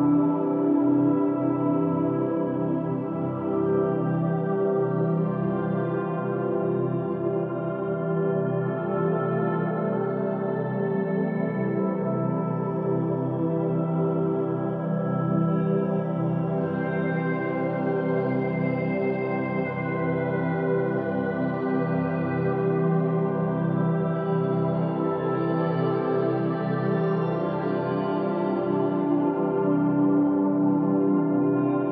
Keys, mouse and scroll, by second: 0.9-1.4 scroll up 1, 1.4-4.5 shift+middle drag, 4.6-6.9 scroll down 2, 6.9-7.6 scroll down 1, 8.2 ctrl+KP_Add, 10.4-13.5 drag, 16.3 Tab, 18.1-18.7 scroll up 1, 18.7-19.0 scroll down 2, 19.5-20.5 middle drag, 20.5-21.9 scroll up 2, 21.9-25.0 middle drag, 25.7-26.0 scroll down 2, 28.4 click, 29.3-30.7 scroll up 2, 30.7-31.9 middle drag.